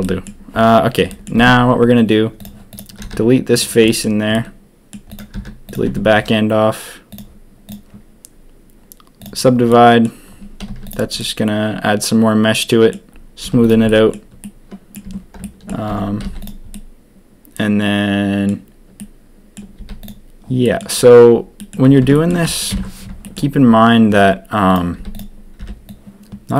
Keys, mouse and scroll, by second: 0.0 drag, 1.0 drag, 1.3 Tab, 2.3 click, 3.0 x, 3.8 click, 4.3 click, 5.3 x, 5.8 Tab, 8.3-9.2 drag, 9.7-10.0 drag, 10.6 z, 11.2-12.9 drag, 13.4 z, 13.8 drag, 14.4-14.9 drag, 15.0 Tab, 15.4 shift+click, 15.8 Tab, 16.2 z, 16.7 click, 19.0 click, 19.7 z, 20.6 click, 21.5 drag, 22.0 Tab, 22.1 click, 22.7 ctrl+KP_3, 24.9 z, 25.5 b.